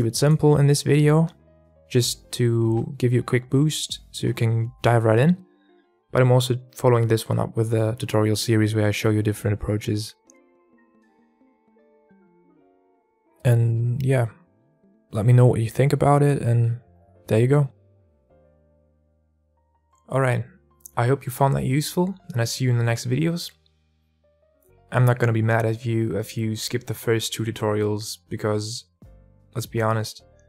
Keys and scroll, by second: 0.5 alt+a.